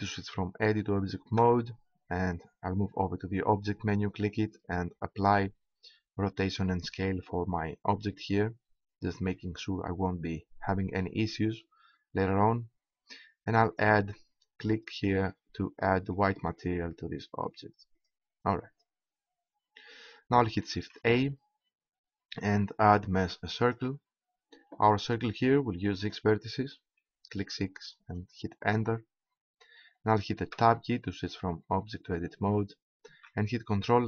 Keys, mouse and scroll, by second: 1.3 Tab, 11.6-13.0 middle drag, 13.6-15.3 drag, 21.1 shift+a, 26.0-27.6 drag, 30.6 Tab, 33.1 ctrl+Tab.